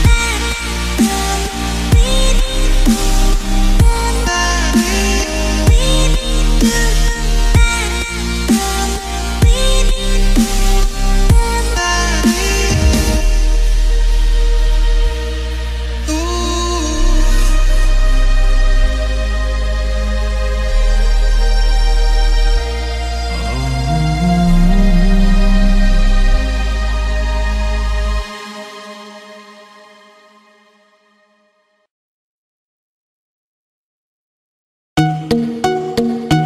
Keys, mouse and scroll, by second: 0.0 click, 1.0-7.0 drag, 7.0 l.